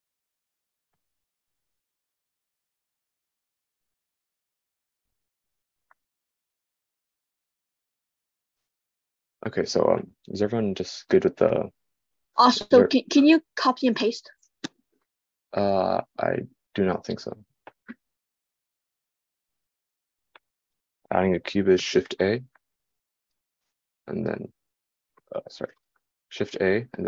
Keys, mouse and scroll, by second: 25.2 shift+a.